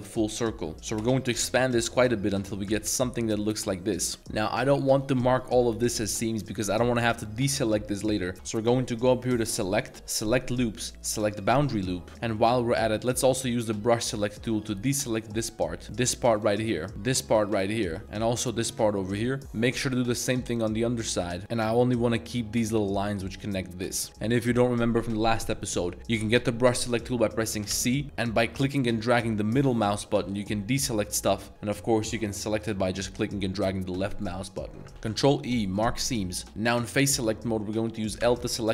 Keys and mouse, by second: 0.7 middle click, 0.7 ctrl+KP_Add, 1.0 ctrl+KP_Add, 1.4 ctrl+KP_Add, 1.8 ctrl+KP_Add, 2.9 ctrl+KP_Add, 3.4 middle click, 4.1 middle click, 4.4 middle click, 6.1 middle click, 6.8 middle click, 9.4-11.8 drag, 11.8 middle drag, 12.1 z, 12.3-12.9 middle drag, 13.2 middle click, 13.6 z, 14.1 c, 15.4 drag, 15.6 middle drag, 15.8 c, 16.3 click, 16.6-16.9 middle drag, 16.9 c, 17.2 drag, 17.4-17.9 middle drag, 18.6 click, 18.6 c, 19.1 c, 19.4 c, 19.7 c, 20.6-21.5 middle drag, 21.4 c, 22.0 middle click, 23.2 middle click, 23.9 z, 24.2 middle drag, 25.6 middle click, 27.0 middle drag, 27.7 c, 31.1 click, 31.5 c, 34.9 ctrl+e, 36.1 middle drag, 38.2 l.